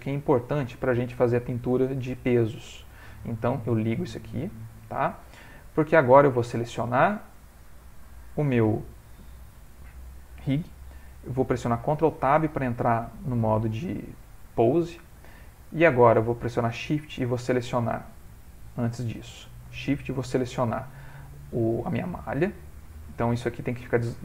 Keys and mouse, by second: 4.8 click, 6.5 click, 12.1 ctrl+Tab, 16.8 shift+click, 18.4 click, 20.1 shift+click, 23.3 click.